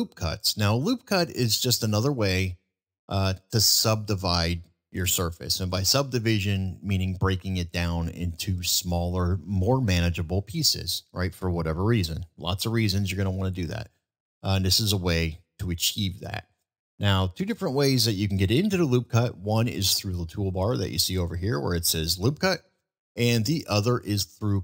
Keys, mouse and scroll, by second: 13.0 middle click.